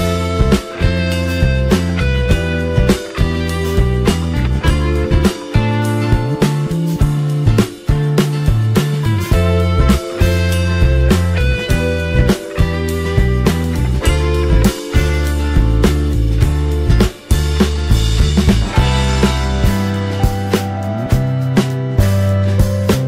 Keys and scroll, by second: 9.8 ctrl+t.